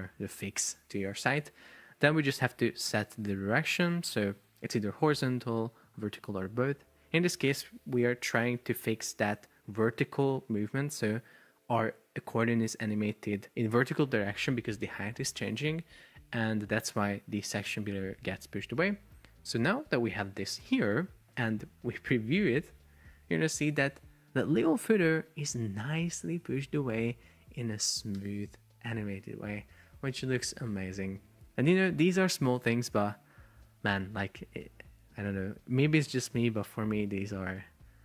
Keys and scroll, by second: 21.7 super+p.